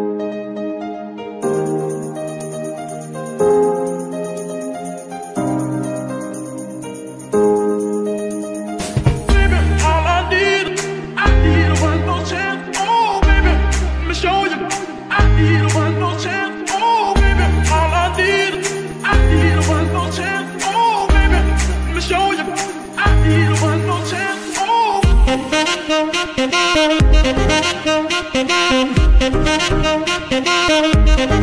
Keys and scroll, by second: 7.6 s, 8.8 KP_3, 9.9 g, 10.9 s, 11.4 g, 12.6 Tab, 13.1 s, 14.1 Tab, 14.6 s, 18.3 Tab, 19.9 s, 22.7 g, 22.8 y, 24.7 g.